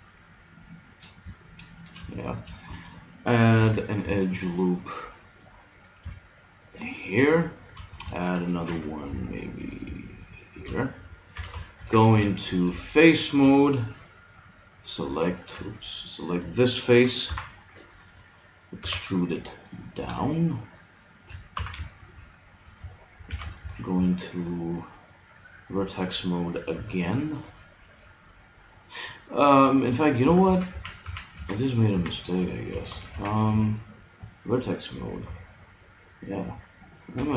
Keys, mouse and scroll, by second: 3.6 ctrl+r, 8.7 ctrl+r, 11.3 a, 11.8 ctrl+Tab, 13.1 middle click, 14.8-17.9 middle drag, 15.5 z, 17.3 KP_3, 18.8 e, 21.6 z, 21.9-23.7 middle drag, 23.3 a, 23.7 ctrl+Tab, 26.7 b, 30.4 ctrl+z, 30.7 ctrl+z, 31.0 ctrl+z, 31.4 ctrl+z, 31.9 ctrl+z, 32.7 a, 33.1 ctrl+Tab, 35.3 b, 37.2 g.